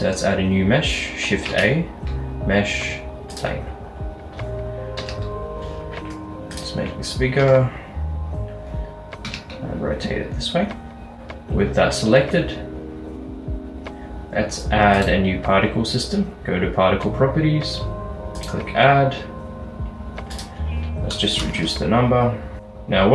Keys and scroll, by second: 1.6 a, 5.1 s, 7.5 r, 9.3 x, 11.2 Return, 14.2 typing, 21.5-22.3 typing.